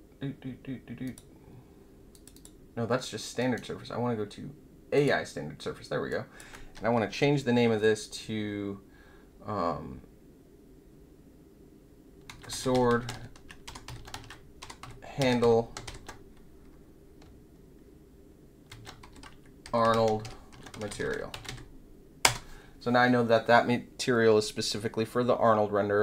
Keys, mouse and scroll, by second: 1.0 click, 2.1 click, 2.3 click, 3.3-4.2 right drag, 4.9 click, 6.0 click, 12.0-16.3 typing, 18.4-21.8 typing, 22.2 Return.